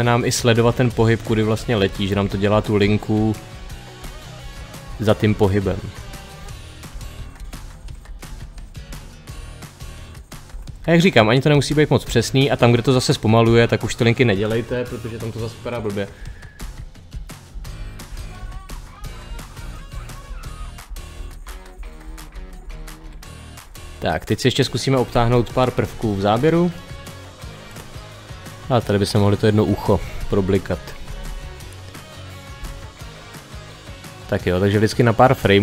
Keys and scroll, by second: 6.7 Page_Down, 10.3 Page_Up, 11.5 Page_Down, 11.9 Page_Up, 13.3 Page_Down, 16.0 Page_Down, 32.0 Page_Down, 32.4 Page_Down.